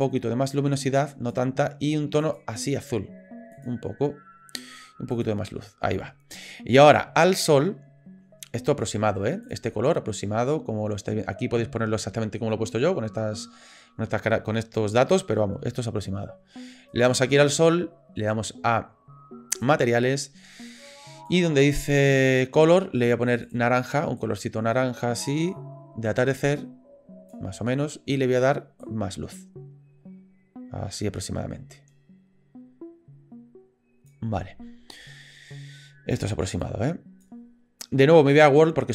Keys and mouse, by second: 9.4 click, 16.9 click, 19.6 click, 21.3 click, 23.4 click, 28.9-34.1 drag, 36.6 click, 38.3 click.